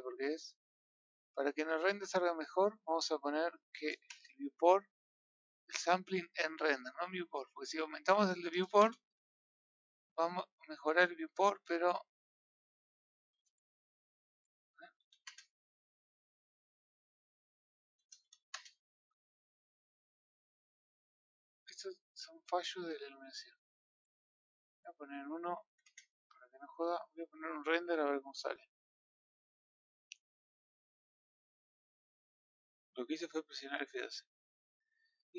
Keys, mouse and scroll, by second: 4.2-27.9 drag.